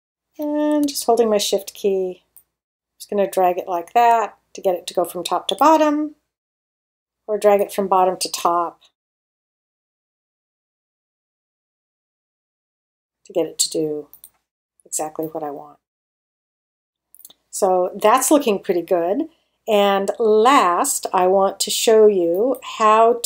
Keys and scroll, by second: 9.7 space, 14.6 space.